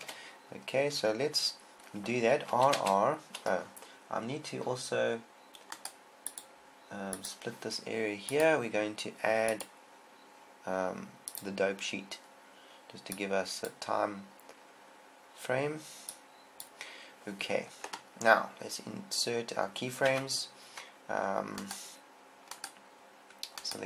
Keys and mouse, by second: 0.5 KP_7, 3.0 r, 6.1 right click, 16.6 click, 20.5 Tab.